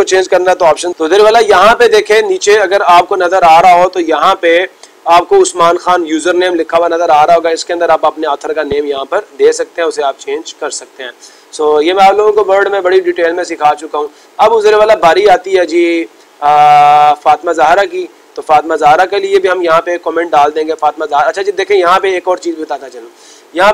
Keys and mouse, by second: 0.8 click, 6.2-7.3 drag, 12.1-13.2 drag, 17.0 click, 17.8 click, 18.5 click, 20.6 click, 22.2 click.